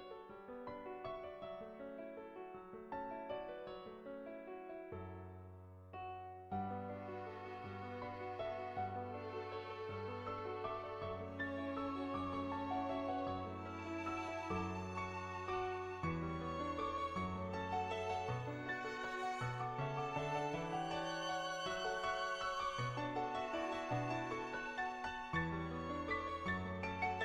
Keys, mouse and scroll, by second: 1.0 ], 1.6-3.2 drag, 3.8 ], 4.0 ], 4.1-5.4 drag, 5.5 [, 5.7-7.5 drag, 8.6 click, 11.8 [, 12.1-13.2 drag, 13.5 ], 13.7 ], 13.9 click, 13.9 ], 16.1 ], 16.3 click, 21.9 ], 22.0 ], 22.3 click, 22.8 ctrl+z, 22.8 [, 23.1 click, 23.6 click, 24.1 click.